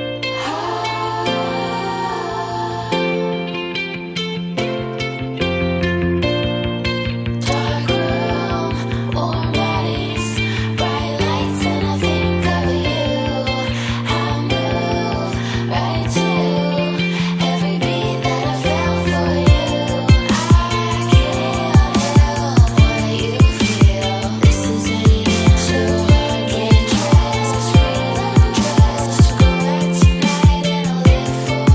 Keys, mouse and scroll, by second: 2.3 click, 4.3 ctrl+scroll down 2, 7.9-11.8 drag, 13.4 click, 17.3 click, 18.7-19.6 typing, 21.0 n, 21.2 d, 21.4 Return, 24.0 click, 24.6 click, 27.0 click, 28.1-30.1 drag.